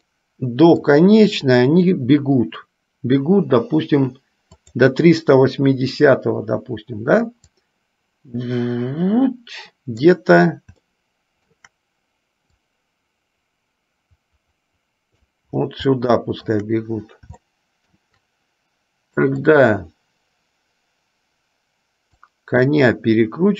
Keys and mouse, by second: 0.1 middle click, 4.8 click, 7.7-10.2 drag, 11.0 shift+middle click, 12.8-15.5 drag, 16.2 shift+middle click, 17.6 shift+middle click, 19.7 click, 22.2-23.5 drag.